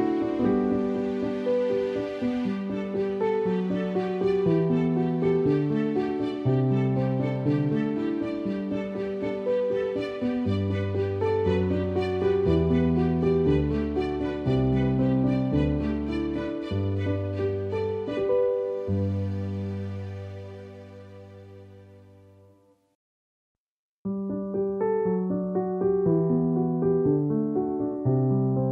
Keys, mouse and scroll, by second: 1.7-2.4 typing, 1.9 alt+click, 7.3 alt+click, 8.2 alt+click, 9.6 alt+click, 11.4 space, 11.6 click, 11.8 space, 12.8 alt+click, 16.3 alt+click, 19.4 alt+click, 19.6 alt+click, 20.5 alt+click, 21.1 alt+click, 24.6 alt+click, 26.3 space, 26.5 click, 26.6 space, 27.1 alt+click, 27.5 alt+click.